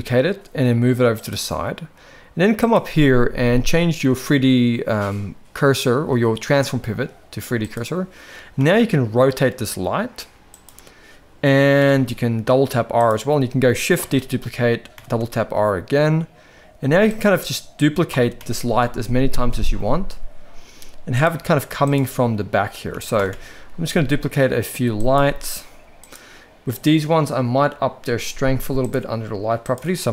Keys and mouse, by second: 2.6-7.8 drag, 8.6 r, 11.8 r, 14.0 shift+d, 18.1 shift+d, 21.4 g, 22.9 shift+d, 25.3 g, 29.6-30.1 drag.